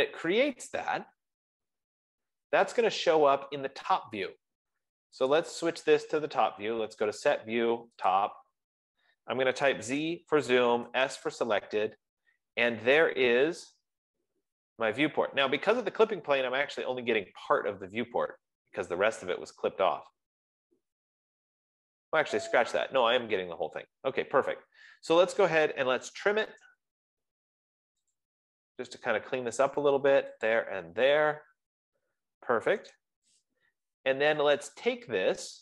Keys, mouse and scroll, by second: 3.1 click, 4.6 click, 5.9 click, 8.6 click, 10.1 z, 10.5 Return, 11.2 s, 11.6 Return, 13.4-15.9 scroll, 21.4-22.1 scroll, 23.4-24.0 scroll, 24.2-24.9 scroll, 26.2-27.3 typing, 28.6 click, 31.0 click, 33.1 Return, 34.3 Escape.